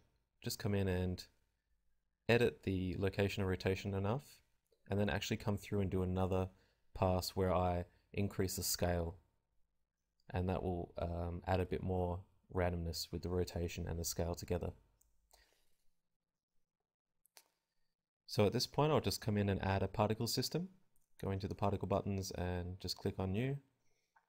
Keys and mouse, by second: 0.2 click, 0.2 g, 0.8 g, 1.3 g, 2.5 click, 4.8 s, 5.1-6.6 drag, 5.1 s, 6.6 g, 7.1 click, 7.1 i, 7.7 click, 9.3 KP_0, 9.4 alt+a, 9.7 click, 10.9 alt+a, 11.7-13.2 drag, 14.3 KP_Decimal, 19.1 alt+a, 20.1 KP_0.